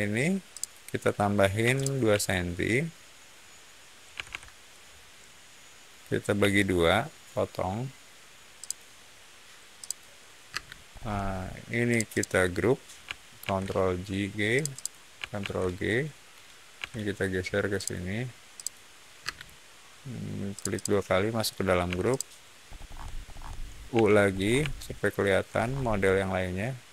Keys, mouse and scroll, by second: 0.4 click, 1.5 m, 1.7 click, 4.0 2, 4.2 Return, 6.3 l, 8.5 click, 9.7 click, 10.4 space, 10.8 middle click, 11.8 click, 12.0 click, 13.3 ctrl+g, 14.5 click, 14.7 click, 15.3 ctrl+g, 16.7 m, 17.7 click, 18.5 click, 19.1 space, 20.5 click, 20.6 click, 21.8 p, 22.0 click, 22.6 scroll down 1, 22.7 scroll up 1, 23.1 scroll down 1, 23.8 u, 24.2 scroll down 1, 24.6 shift+middle click, 25.5 scroll down 1.